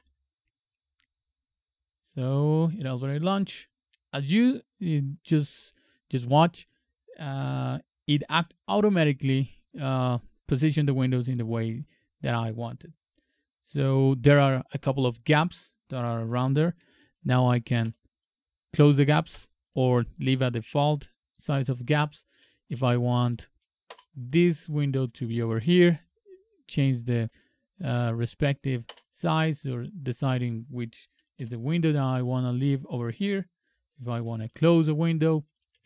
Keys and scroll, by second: 17.8 shift+super+=, 19.3 shift+super+-, 22.3 super+Up, 23.9 super+Return, 25.0 super+Right, 25.9 super+Right, 27.3 super+Down, 28.9 super+Return, 31.4 super+e, 34.1 c, 35.7 super+Left.